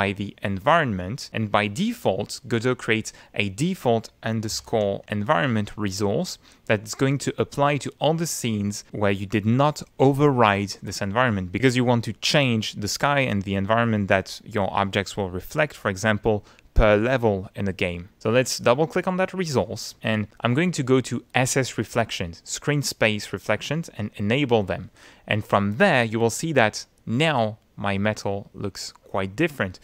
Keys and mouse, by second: 4.2-5.5 typing, 6.2 click, 18.4 click, 21.6 click, 24.0 click, 26.1 click, 29.7-29.8 middle drag.